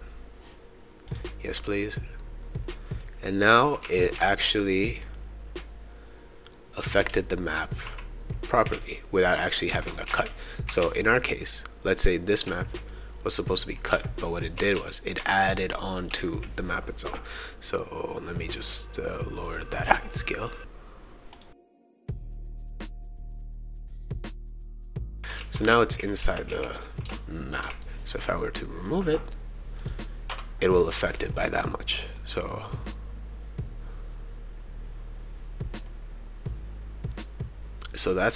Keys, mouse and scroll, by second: 1.1 click, 3.0-9.6 right drag, 3.8 d, 7.1 s, 7.5 q, 9.1 shift+a, 10.1 shift+a, 10.1-12.4 shift+right drag, 10.8 shift+a, 13.9-15.8 shift+right drag, 13.9 shift+d, 19.4 click, 21.3 click, 21.5-23.4 typing, 21.6 right click, 21.9 shift+right click, 23.3 click, 23.7 right click, 24.0 click, 24.9-27.6 typing, 25.1 right click, 28.9 click, 29.8 click, 32.1-38.3 drag.